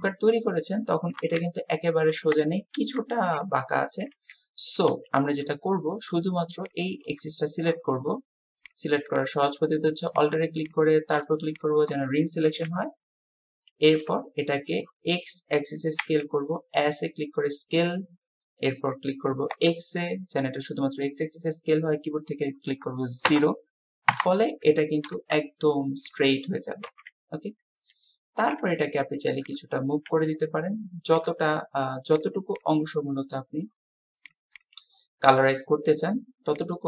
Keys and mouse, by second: 1.2 KP_7, 4.8 click, 8.7 click, 10.6-11.6 alt+drag, 12.6 KP_7, 14.2 shift+click, 14.6 typing, 16.0 s, 28.4 g.